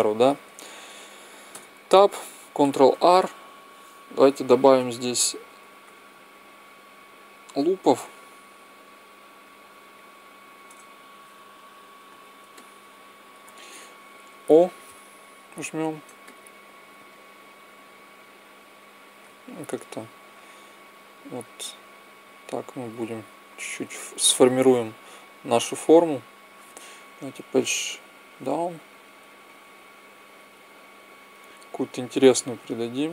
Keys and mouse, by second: 1.4 Tab, 2.8 ctrl+r, 12.4 middle click, 13.2 middle click, 14.2 o, 15.1 right click, 15.5-16.5 drag, 17.7-19.0 drag, 19.8-23.3 drag, 23.5-26.4 drag, 24.6-25.8 right drag, 33.0 click.